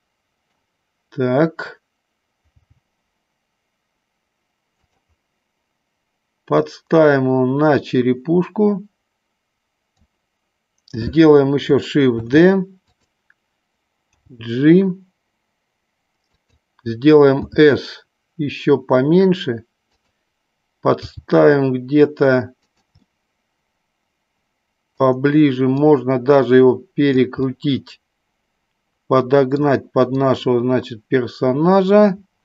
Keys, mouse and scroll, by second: 2.6 g, 5.0 click, 6.5-10.1 drag, 12.3 shift+d, 14.4 g, 16.5 click, 17.4 s, 20.0 click, 21.1 g, 22.9 click, 23.1-25.1 middle drag, 25.7-27.1 drag, 27.5-29.5 middle drag, 30.3-32.4 drag.